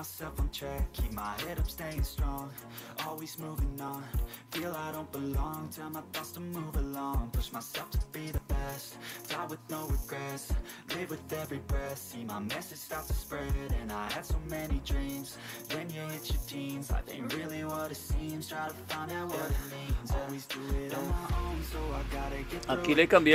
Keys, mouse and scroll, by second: 3.6 click, 4.5 super+Return, 8.0 click, 8.9-9.7 typing, 16.2 click, 19.6 click, 22.5 click.